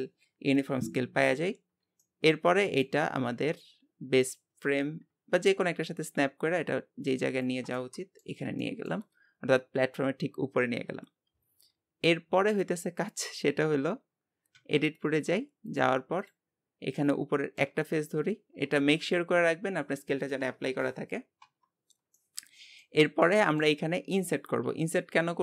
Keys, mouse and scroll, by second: 2.0-3.1 middle drag, 3.1-4.3 scroll up 1, 4.3-7.4 drag, 7.7-11.8 middle drag, 14.6 Tab, 15.7 click, 17.0 middle click, 17.7 Tab, 21.4 Tab, 22.1-25.4 middle drag.